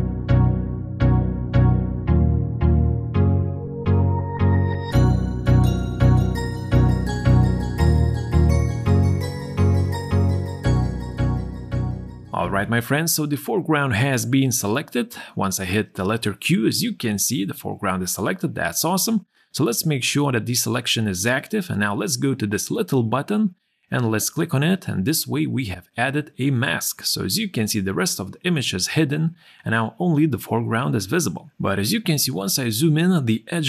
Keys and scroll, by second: 0.0-2.1 typing, 1.2 ctrl+0, 3.3-6.3 typing, 4.4 ctrl+0, 7.3 q, 7.6 space, 9.0 q, 9.2 space, 10.1 space, 15.2 q, 17.4 q, 29.1 z.